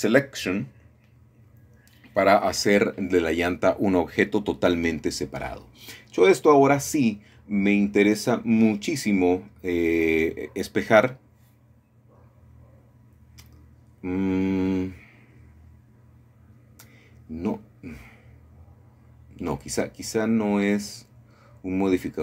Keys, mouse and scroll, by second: 0.0 click, 1.2 l, 3.3 p, 4.7 click, 7.8 middle click, 9.1 click, 9.7-10.8 scroll down 1, 10.2-11.8 shift+middle drag, 13.7-14.8 drag, 17.5-18.6 drag, 20.9-22.2 scroll down 2.